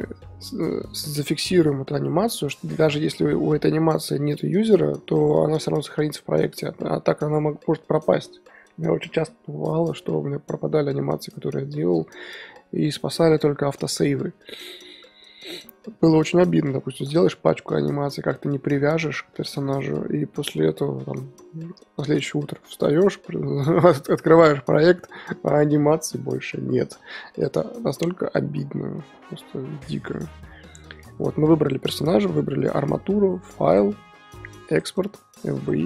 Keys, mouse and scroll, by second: 2.8-29.6 middle drag, 29.6 scroll down 2, 31.3-32.0 scroll up 3, 35.8 click.